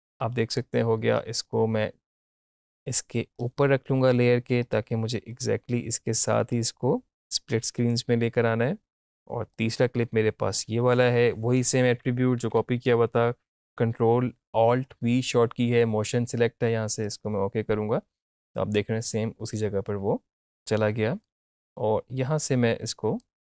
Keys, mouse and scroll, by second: 1.1-11.5 drag, 12.4 ctrl+alt+v, 17.0 click, 20.3-23.4 drag.